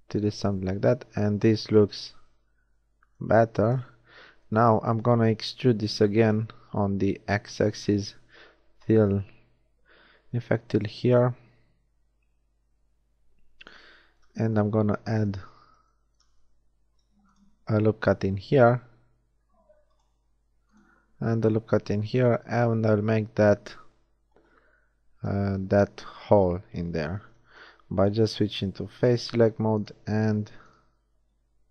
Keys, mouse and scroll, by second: 3.7 KP_1, 5.8 e, 14.3 shift+z, 16.8 ctrl+r, 20.2 ctrl+r, 27.3 ctrl+Tab.